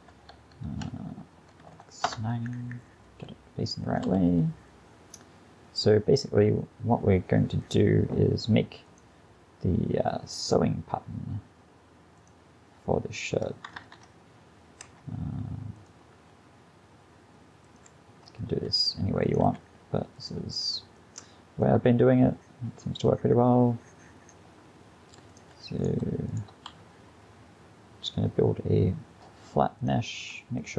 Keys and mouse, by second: 3.1 s, 4.1 g, 13.8 Tab, 14.9 g, 16.2 g, 18.7 s, 19.5 g, 25.8 g, 26.7 e, 30.3 g.